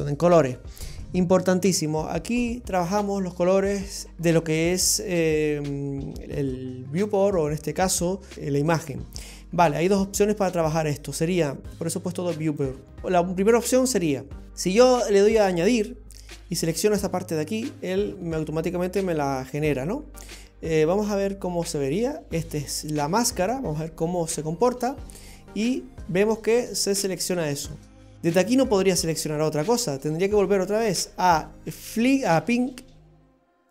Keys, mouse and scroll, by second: 6.5 click, 9.9 click, 11.4 click, 13.0 click, 15.5 click, 21.9 click, 25.7 click.